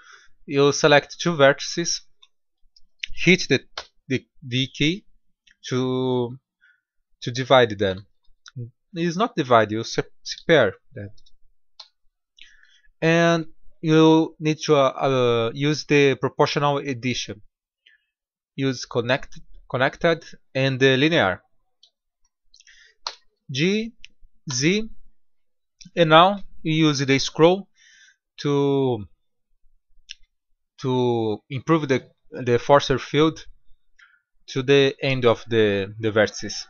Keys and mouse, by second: 1.6-4.0 drag, 3.6 v, 7.3-8.9 middle drag, 10.2 KP_3, 11.6 KP_5, 15.2 click, 16.2 middle drag, 19.5-21.5 drag, 21.9-22.9 middle drag, 22.9 g.